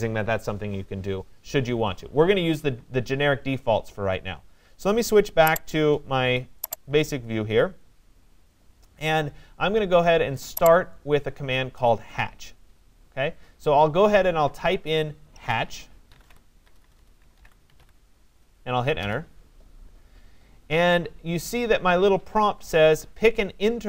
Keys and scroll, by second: 15.8 j, 16.6 BackSpace, 19.0 Return.